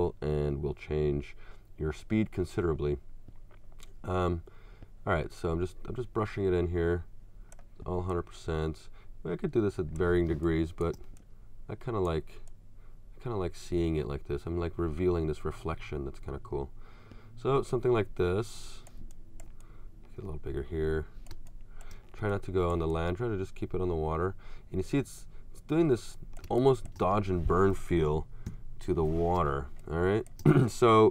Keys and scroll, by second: 10.3 space, 21.4 space, 26.5 space, 28.1 alt+super+-, 29.4 alt+super+space.